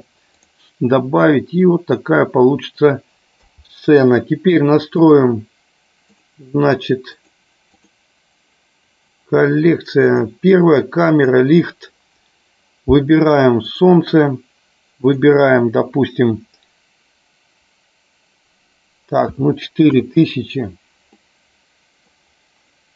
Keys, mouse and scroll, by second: 1.7 middle click, 3.3 KP_0, 5.1 click, 6.1 click, 7.2 click, 11.2 click, 13.7 click, 15.1 click, 21.2-22.4 middle drag.